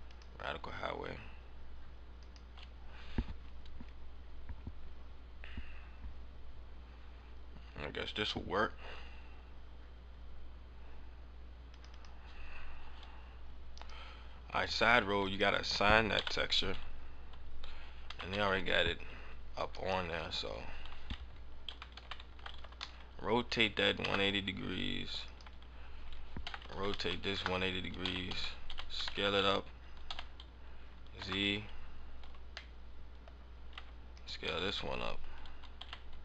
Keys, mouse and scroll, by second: 12.1 click, 12.2 click, 13.7 click, 15.2 click, 16.0 KP_7, 17.2 KP_7, 18.0 a, 18.2 a, 19.6 right click, 21.6 a, 21.9 a, 22.2 r, 25.2 right click, 26.3 r, 28.0 a, 28.3 a, 28.6 s, 30.0 s, 31.1 KP_2, 32.2 Tab, 32.6 middle click, 33.2 scroll up 4, 33.8 Tab, 34.2 right click.